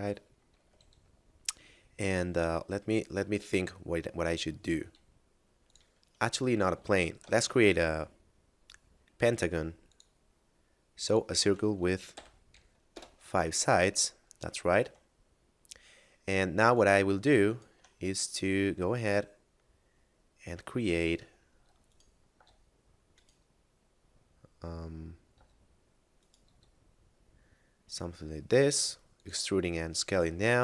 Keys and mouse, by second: 0.5 Tab, 4.7 s, 5.5 click, 6.3 Tab, 6.7 x, 6.9 click, 7.5 shift+a, 9.9 click, 11.9 5, 13.0 Return, 14.7 Tab, 15.1 middle click, 16.7 right click, 17.4 shift+right click, 18.1 middle click, 20.9 a, 21.5 s, 21.8 right click, 22.3 s, 23.2 right click, 25.3 e, 26.2 right click, 26.5 s, 29.0 click.